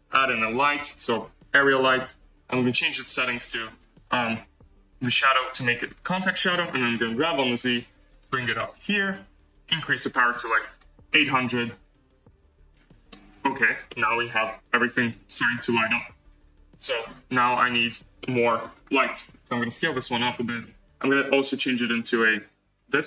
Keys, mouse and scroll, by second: 1.6 shift+a, 3.3 click, 4.1 click, 5.9 click, 6.8 g, 12.6 0, 13.0-13.6 middle drag, 13.8 middle click, 14.5 space, 15.7-18.1 drag, 18.1 middle click, 18.6-19.0 scroll down 4, 19.0-19.8 middle drag, 19.8 s, 22.9 drag.